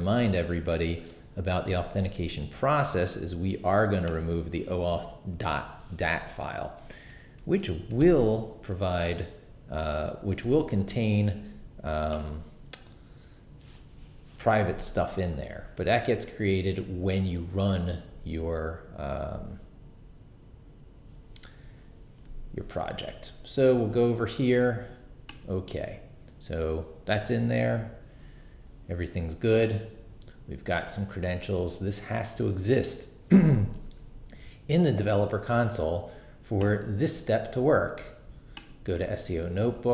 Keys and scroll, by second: 8.0 super+BackSpace.